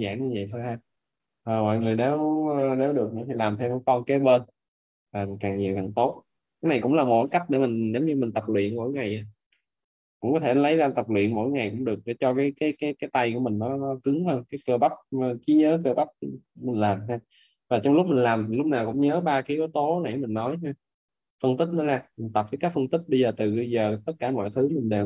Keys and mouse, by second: 11.3 right click, 19.7 right click, 20.9 right click.